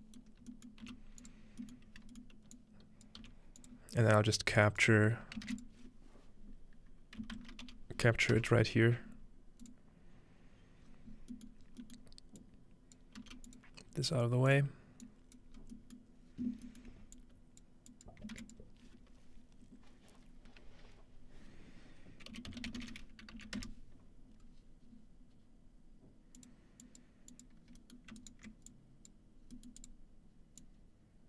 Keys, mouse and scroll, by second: 0.9 typing, 1.2-3.6 drag, 3.2 typing, 3.8 scroll down 2, 5.0 scroll up 2, 5.5 shift+a, 7.2-8.1 typing, 9.6-10.3 drag, 10.9-13.0 scroll down 1, 12.4-14.6 drag, 13.2 g, 13.9-17.2 scroll up 3, 15.0 click, 17.2-20.4 drag, 18.4 shift+a, 22.3-23.8 typing, 26.4 click, 26.8 click, 27.3 click, 27.7 click, 27.7-28.7 scroll up 2, 28.2-29.7 alt+middle drag, 28.7-29.1 alt+drag, 29.8 click, 30.6-31.2 drag.